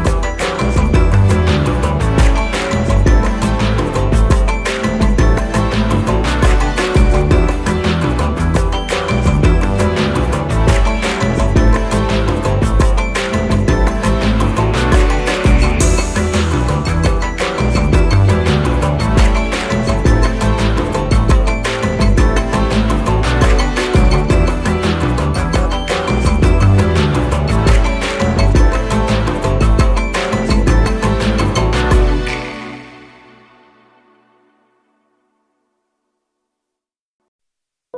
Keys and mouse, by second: 0.8-1.3 drag, 7.5 alt+click, 12.7 click, 14.3-14.8 drag, 18.1-19.6 drag, 28.8 click, 32.3 alt+click, 34.1 shift+click, 35.4-37.4 alt+drag.